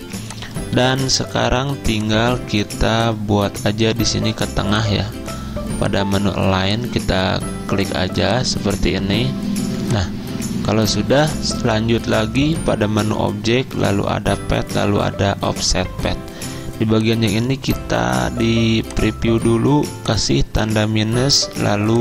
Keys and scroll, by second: 0.0-1.0 typing, 21.3 -.